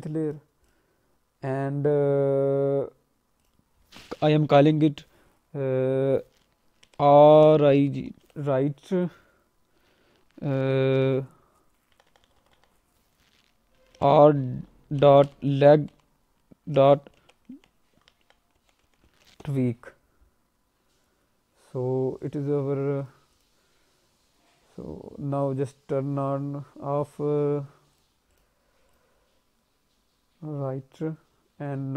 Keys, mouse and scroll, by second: 0.2 click, 0.6 click, 3.4 click, 12.0 BackSpace, 12.2 BackSpace, 12.5 BackSpace, 23.0 click, 23.3 click, 26.0-26.4 scroll up 1, 27.9 click, 28.3 click, 28.8 click.